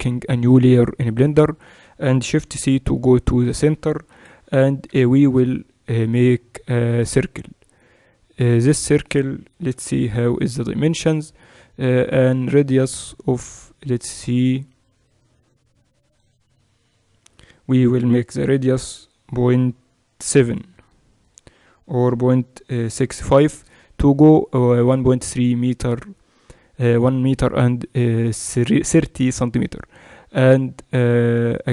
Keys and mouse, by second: 1.6-2.6 middle drag, 2.6 shift+c, 4.1 KP_1, 5.1 shift+a, 8.5-12.9 middle drag, 9.7 F6.